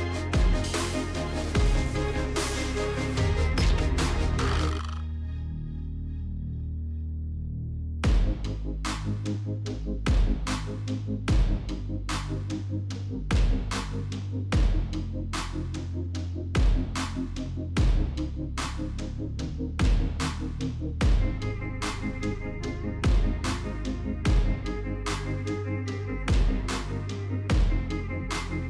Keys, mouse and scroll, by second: 0.7 click, 0.7-2.0 typing, 2.1 Return, 3.6 typing, 8.0 click, 8.6-9.9 typing, 10.9 click, 11.2 click, 15.7 click, 16.2 0, 16.7 click, 17.9 click, 18.3 click, 18.7 ctrl+c, 19.1 ctrl+d, 19.9 click, 21.6 click, 22.7 click, 22.9 click, 23.4-23.8 typing, 25.0 Tab, 25.3 Tab, 25.7 Tab, 25.8-26.6 typing, 26.9 Tab, 28.0-28.6 typing.